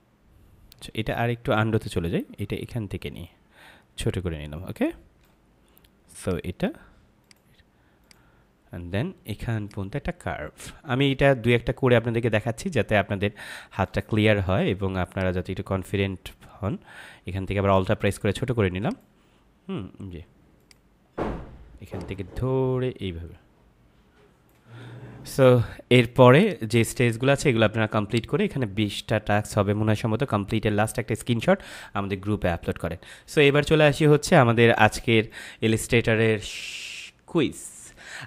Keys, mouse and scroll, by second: 2.6 click, 6.1 click, 15.0 click, 18.8 click, 35.2 click.